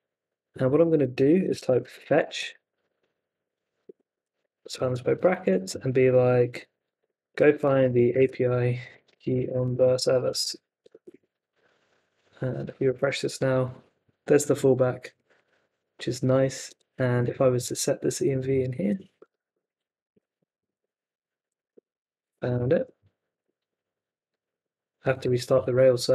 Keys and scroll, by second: 0.7-4.7 typing, 4.4 Left, 5.7 Left, 6.5-11.1 typing, 11.5 super+Tab, 12.9 super+r, 16.3 super+Tab, 16.7 Escape, 17.6 super+c, 19.2 Escape, 19.4-22.4 typing, 19.5 Escape, 20.0 super+v, 20.8 Left, 22.5 super+s, 22.7 super+Tab, 23.3 super+r, 24.3 super+Tab, 26.0 ctrl+c.